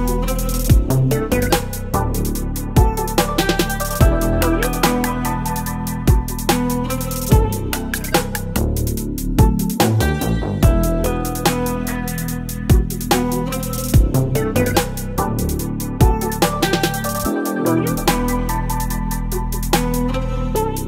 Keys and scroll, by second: 0.2 Return, 1.3 space, 1.9 space, 2.6 ctrl+t, 3.6 Return, 5.2 v, 6.5 Delete, 7.3 space, 7.5 space, 8.3 v, 9.7 ctrl+BackSpace, 10.2 space, 11.7 ctrl+BackSpace, 11.9 space, 12.7 v, 13.0 space, 14.3 Delete, 14.5 space, 15.5 v, 15.9 Left, 16.0 Left, 16.0 Left, 17.0 space, 18.0 Delete, 18.2 v, 18.7 space, 20.2 ctrl+BackSpace, 20.4 space.